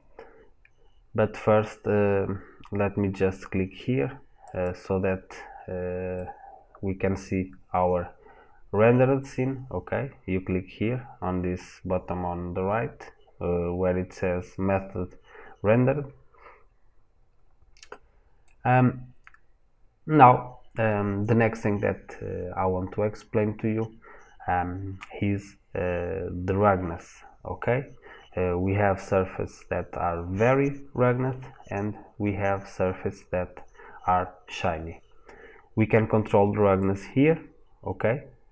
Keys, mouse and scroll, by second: 6.0 middle click, 7.5 scroll up 1, 8.4 scroll down 1, 16.8-17.2 scroll down 1, 17.2-17.7 scroll up 1, 17.7 middle click, 37.1 click.